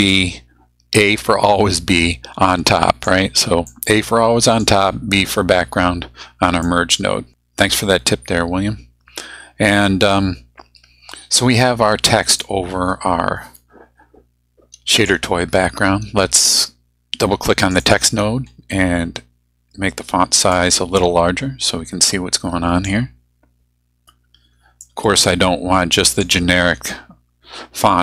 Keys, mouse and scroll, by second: 0.0 click, 2.0-3.2 drag, 3.7 click, 6.7-7.3 drag, 12.4-15.2 drag, 17.6 click, 20.5-23.0 drag, 24.8-26.4 drag.